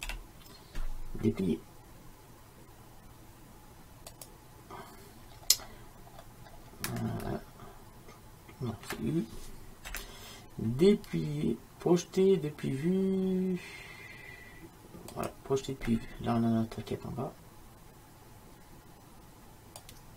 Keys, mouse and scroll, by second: 0.1 u, 5.5-10.0 middle drag, 10.0 u, 19.9 click.